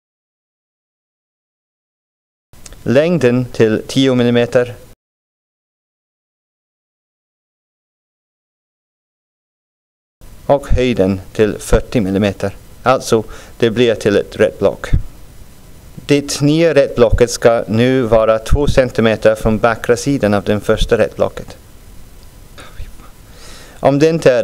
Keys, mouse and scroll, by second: 2.3 click, 3.7 click, 6.0-8.0 drag, 10.8 click, 13.4-16.4 drag, 20.6 middle click, 21.4-22.6 scroll down 2, 23.1 scroll up 2, 23.7-24.2 scroll up 3.